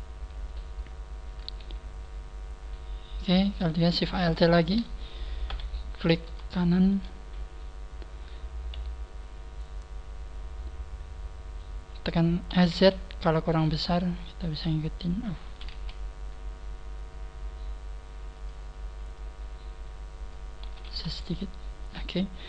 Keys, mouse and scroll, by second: 0.0-0.3 scroll down 2, 0.8 scroll up 1, 1.5 a, 2.0 middle click, 2.8 middle click, 4.0 alt+shift+right click, 4.4 scroll down 4, 5.4 KP_3, 5.4 scroll down 1, 6.4 shift+middle click, 7.2 scroll up 1, 12.5 s, 13.4 click, 13.4 s, 14.0 click, 14.0 click, 15.6 5, 19.0 click, 19.1 click, 20.6 5, 21.8 s.